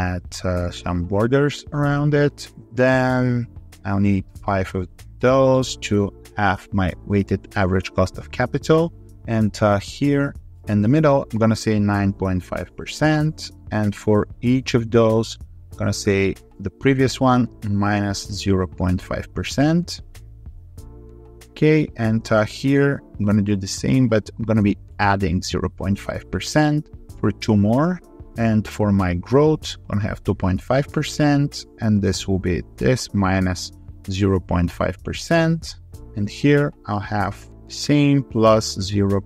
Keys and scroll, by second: 20.8 ctrl+v, 26.9 ctrl+r, 35.9 ctrl+v.